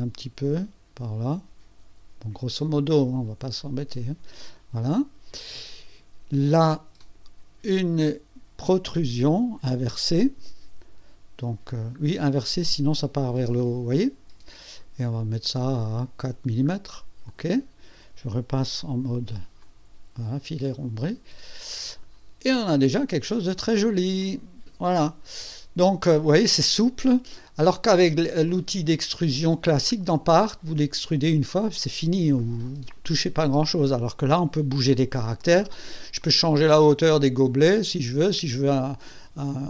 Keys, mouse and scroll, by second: 3.8 click, 7.0 click, 9.6 click, 11.5-11.8 scroll down 1, 12.9 click, 13.4 click, 13.6 click, 15.1 scroll down 1, 15.7-16.2 scroll down 2, 17.3 click, 17.4 click, 19.6-22.2 drag, 22.3 click, 22.5-24.0 drag, 24.2-27.6 drag, 28.5-29.5 drag, 36.2-38.4 drag.